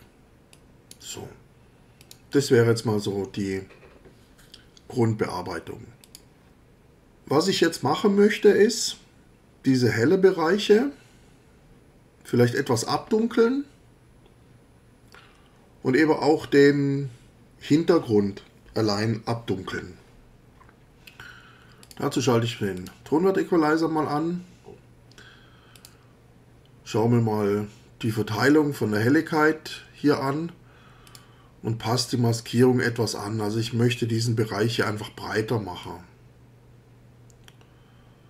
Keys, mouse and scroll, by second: 0.5 click, 2.0 click, 6.0 click, 21.8 click, 22.7 click, 25.7 click, 31.1 click, 35.8-38.2 drag.